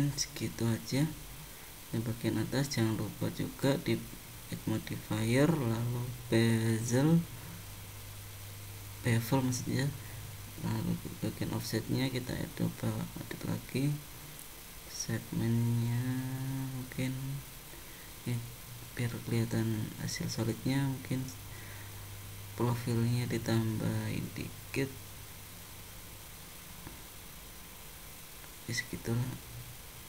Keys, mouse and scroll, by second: 4.3 click, 10.4 click, 16.0 click, 17.0 middle click, 21.6 click, 23.9 0, 29.3 click.